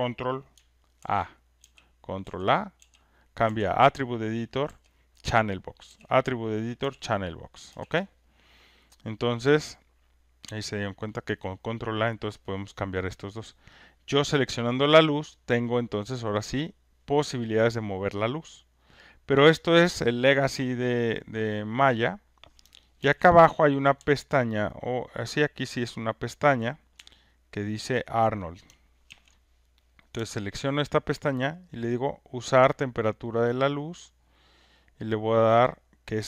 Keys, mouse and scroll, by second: 0.9 ctrl+a, 1.6 ctrl+a, 2.2 ctrl+a, 2.8 ctrl+a, 3.4 ctrl+a, 4.6 ctrl+a, 23.0 ctrl+F1, 23.6 click, 26.5 ctrl+click, 27.9 ctrl+shift+click, 29.0 ctrl+F1, 30.2 click, 31.8 click, 33.8 click.